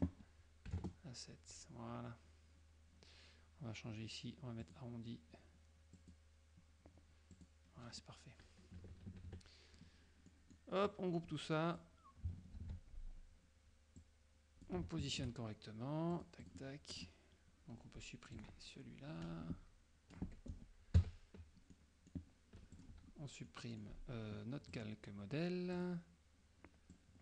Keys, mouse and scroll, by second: 0.8 KP_7, 0.9 KP_Enter, 4.7 click, 6.0 click, 7.4 click, 8.9 KP_Subtract, 10.4 click, 11.0 click, 12.7 ctrl+g, 14.0 click, 15.2 shift+click, 16.2-16.8 drag, 17.0 click, 18.4-20.3 drag, 20.3 Delete, 21.1 KP_Subtract, 21.8 middle click, 22.8 click, 23.6 middle click, 24.8 click, 25.8 click, 27.0 click.